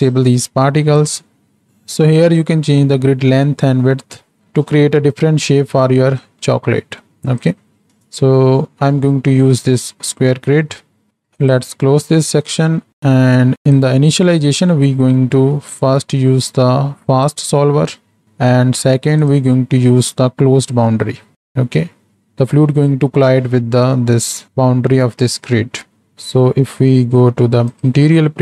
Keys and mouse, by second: 7.4 click, 11.3 click, 12.2 middle click, 13.6 click, 14.6 middle click, 15.3 middle click, 17.4-20.0 drag, 20.0 middle click, 26.6 z.